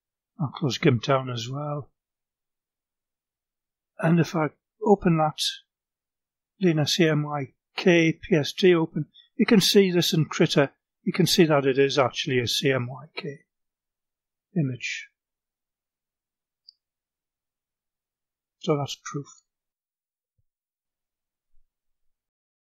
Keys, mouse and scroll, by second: 1.4 click, 2.5 click, 3.5-6.9 drag, 17.7-19.6 drag, 20.9 click.